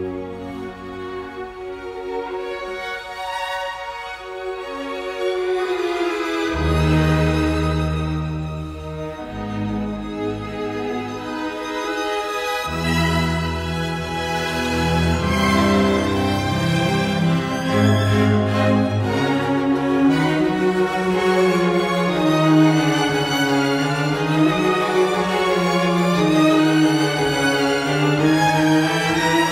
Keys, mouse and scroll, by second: 17.8 Escape, 23.1 t, 23.2 space, 24.2 typing, 25.3 space, 27.8-28.5 typing.